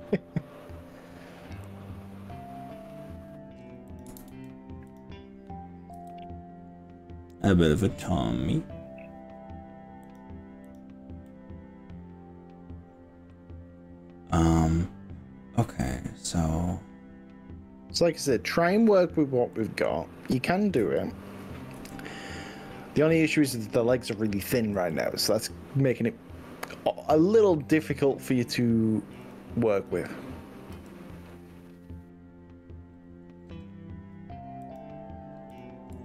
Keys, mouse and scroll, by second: 3.9 click, 4.3 ctrl+z, 4.9 click, 6.0 g, 10.1 click, 10.7 click, 11.3-17.0 middle drag, 17.0 click, 17.1-19.1 middle drag, 19.1 click, 20.8 KP_3, 21.8 KP_1, 24.8 g, 27.9 click, 28.5 click, 29.3 click, 30.8 g, 34.7 click, 35.5 click.